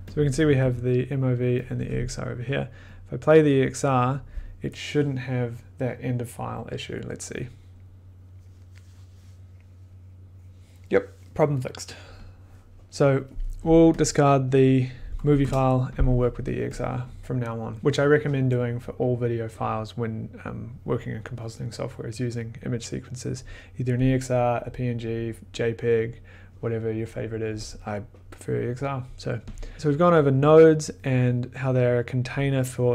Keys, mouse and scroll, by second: 0.0 click, 0.0 2, 0.1 click, 0.3 click, 0.4 1, 1.6 click, 1.7 2, 2.9 click, 14.7 click, 15.4 BackSpace, 16.3 click, 16.7 click, 29.8 click, 30.3 click.